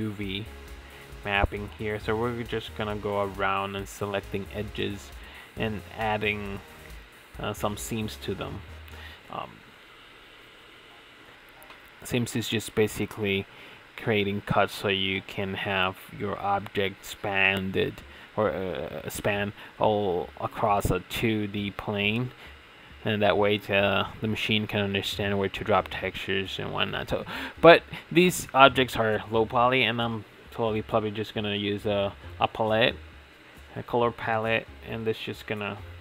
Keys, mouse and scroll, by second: 0.4 click, 2.7 middle click, 3.7 middle click, 3.9 middle click, 4.8 middle click, 5.3 middle click, 9.9-12.9 middle drag, 13.0 middle click, 13.6 middle click, 14.3-15.7 middle drag, 15.9 middle click, 16.3 middle click, 17.2-20.0 middle drag, 20.4-21.4 middle drag, 21.5 middle click, 22.4 middle click, 22.9 middle click, 23.3 click, 23.6 middle click, 24.1-24.5 middle drag, 24.7 middle click, 25.3 middle click, 26.2 middle click, 27.4 middle drag, 29.9 middle click, 32.8 middle click, 34.0 middle click, 34.7 middle click, 35.5 middle click, 35.7 middle click.